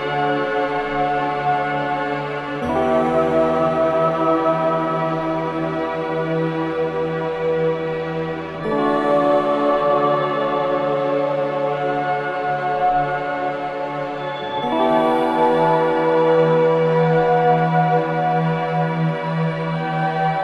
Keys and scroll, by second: 0.0-0.8 typing, 10.5 space, 17.0-17.8 typing.